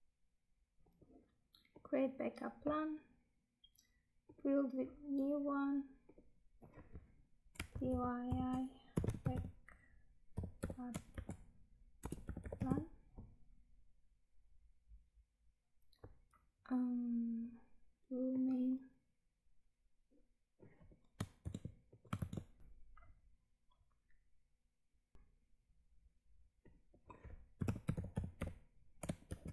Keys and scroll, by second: 21.3 ctrl+c, 22.1 ctrl+v, 22.6 Tab, 25.1 Tab.